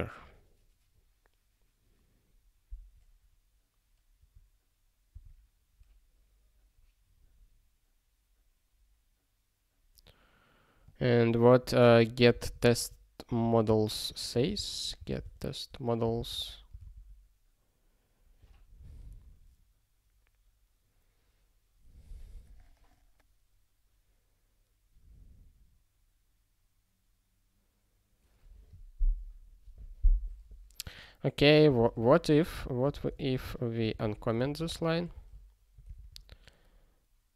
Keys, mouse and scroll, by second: 5.1 super+w, 10.8 click, 11.8 ctrl+a, 12.2 ctrl+space, 12.6 alt+;, 13.6 Return, 14.1 (, 16.3 Return, 16.4 ctrl+e, 31.6 ctrl+space, 31.8 ctrl+a, 32.0 alt+;, 32.4 ctrl+p, 32.8 ctrl+space, 32.9 ctrl+e, 33.8 ctrl+space, 34.0 ctrl+a, 34.4 alt+;, 34.7 ctrl+s, 35.1 ctrl+e, 36.0 ctrl+s, 36.9 scroll up 1.